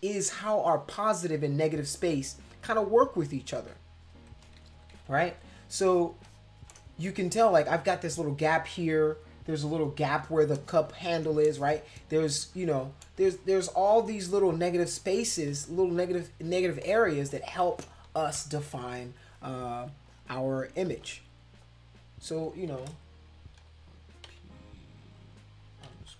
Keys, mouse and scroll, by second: 4.6 ctrl+=, 4.7 ctrl+=, 4.9 ctrl+=, 5.2 space, 5.8 click, 6.2 click, 7.1 space, 7.2 click, 8.2 middle click, 10.5 space, 10.6 click, 11.5 space, 11.5 click, 13.0 space, 13.2 click, 13.8 click, 14.9 click, 15.5 click, 16.8 click, 17.3 click, 20.0 click, 20.9 ctrl+z, 21.6 click, 24.3 p, 25.9-26.1 typing.